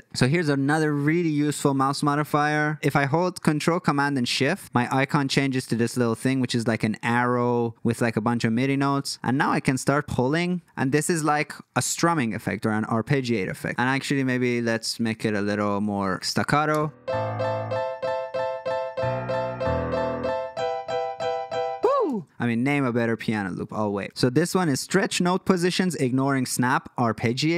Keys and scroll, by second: 16.7 space, 22.1 space.